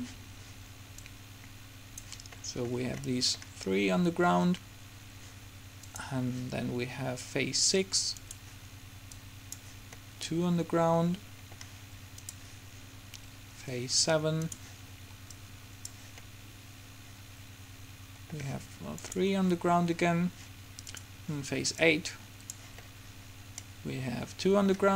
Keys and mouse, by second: 1.2-2.9 drag, 3.2-6.1 middle drag, 9.3 click, 10.2 middle click, 15.4-16.8 drag, 16.8 middle click, 21.9 click, 22.9 middle click.